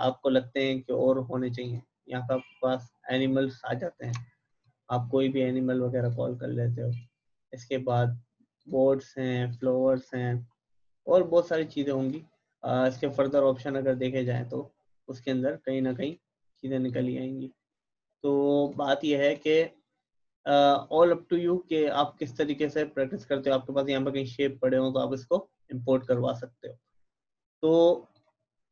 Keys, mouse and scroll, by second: 10.4 scroll down 1, 11.5-14.2 drag, 22.5 click, 25.8-26.6 typing, 26.1 click.